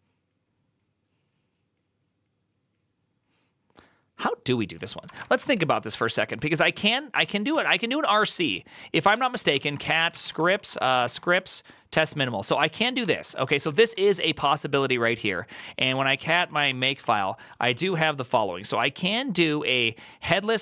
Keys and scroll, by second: 5.0 ctrl+a, 5.2 2, 5.4 ctrl+c, 5.5 ctrl+c, 5.6 ctrl+c, 5.9 ctrl+c, 7.4 alt+{, 9.2-11.3 typing, 11.8 Return, 12.5-14.4 typing, 14.5 ctrl+c, 15.5-16.8 typing, 16.9 Return.